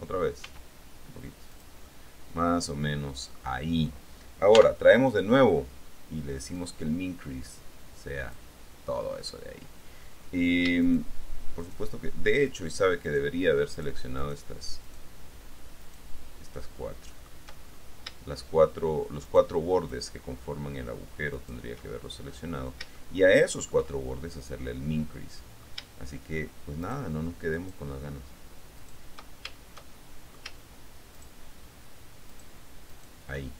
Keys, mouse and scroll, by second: 0.6 s, 1.7 click, 2.9 middle click, 4.7 n, 6.7-8.7 drag, 11.0 shift+right click, 11.8 shift+right click, 12.6 shift+right click, 13.2 shift+right click, 13.9 shift+right click, 14.4 shift+right click, 15.0 shift+right click, 16.0 shift+right click, 16.8 shift+middle click, 20.0 shift+right click, 21.5 shift+middle click, 22.2 shift+middle click, 23.1 shift+middle click, 24.4 middle click, 25.2 click, 26.0 shift+middle click, 26.0 scroll, 27.0 shift+middle click, 27.2-28.5 shift+right drag, 29.0 shift+middle click, 29.1 shift+right click, 30.0 shift+middle click, 31.3 shift+right click, 32.4 shift+right click, 33.0 shift+right click.